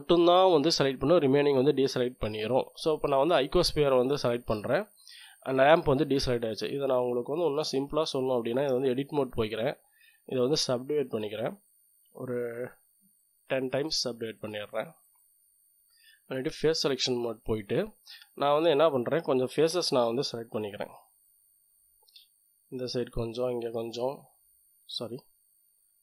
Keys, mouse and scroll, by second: 6.2-6.8 scroll up 1, 6.8 click, 7.6 click, 7.7 middle click, 8.1-8.7 scroll up 1, 8.5 Tab, 9.6 click, 10.4 click, 11.7 click, 13.1-15.1 middle drag, 15.1 click, 16.4 click, 16.9 middle click, 17.4 click, 18.3 middle click, 18.7 click, 19.8-20.5 scroll up 1, 21.2 click, 22.0 middle click, 22.8 middle click, 23.1 click, 23.6-24.1 scroll up 1, 24.1 click, 25.9 click.